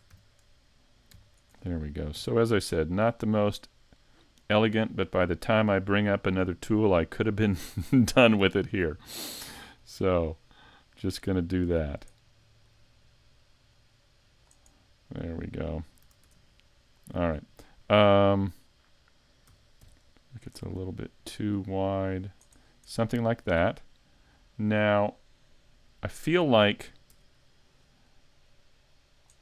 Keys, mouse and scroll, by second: 1.2 alt+right click, 2.2 g, 4.6 click, 7.7 middle click, 9.8 right click, 10.4 middle click, 12.7 click, 14.7 middle click, 15.8 scroll down 4, 16.0 a, 16.2 Tab, 16.5-17.3 scroll down 2, 17.3-18.0 scroll up 4, 19.5 s, 22.6 scroll down 3, 22.9 middle click, 23.7-24.3 scroll up 5, 24.3 scroll up 4, 27.1 Tab, 27.9 right click, 28.5 click.